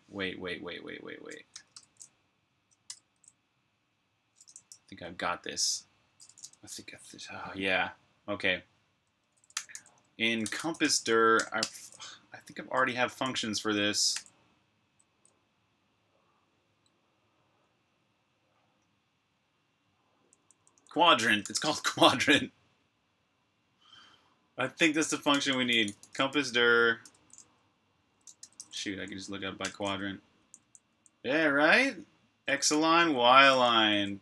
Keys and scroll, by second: 1.6 Return, 1.6 q, 4.6 super+[, 6.3 typing, 9.2-11.5 typing, 13.1-14.5 typing, 20.1-21.7 typing, 23.7 typing, 24.9-26.7 typing, 27.0 Return, 27.9-30.8 typing, 32.6-34.0 typing.